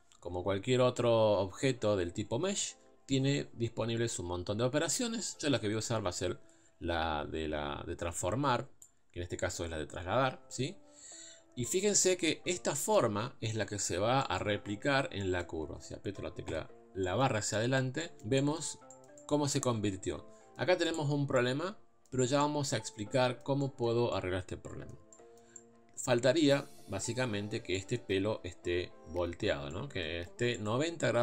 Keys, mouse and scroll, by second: 1.2-1.7 scroll down 1, 1.7 scroll down 1, 1.8 scroll up 1, 2.7-5.5 scroll down 1, 5.9 click, 11.2 scroll up 1, 11.8 scroll down 1, 12.1 middle click, 12.5 scroll up 2, 12.8 middle click, 13.6 Tab, 14.2-16.5 middle drag, 16.5 KP_Divide, 16.7-20.9 middle drag, 20.9 click, 21.3-31.2 middle drag.